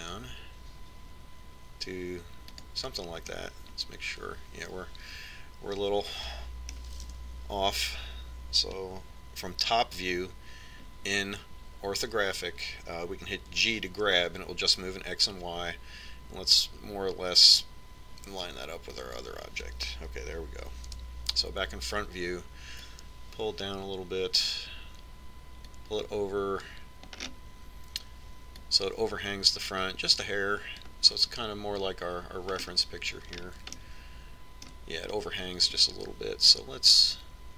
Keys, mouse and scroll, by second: 5.0-6.8 middle drag, 8.8 KP_7, 15.3 g, 22.7 KP_1, 24.7-29.0 drag, 29.0-31.4 middle drag, 30.5-32.2 drag, 34.5-37.4 middle drag.